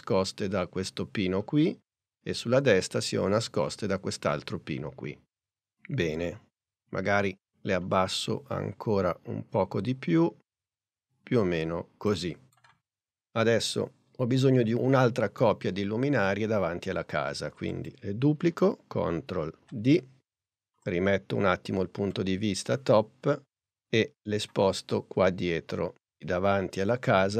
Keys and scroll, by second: 19.6 super+d.